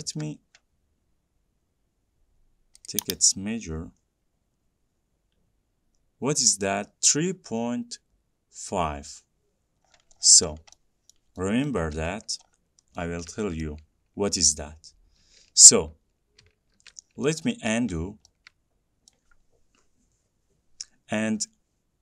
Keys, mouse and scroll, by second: 0.3 t, 3.1 click, 4.3 scroll, 5.0-5.5 scroll, 10.1 scroll, 10.3-11.5 scroll down 20, 11.3 middle click, 11.9 middle click, 13.2 scroll, 13.8 middle click, 15.7 ctrl+z, 16.7 ctrl+z, 17.3 scroll, 18.2 middle click, 19.3 middle click.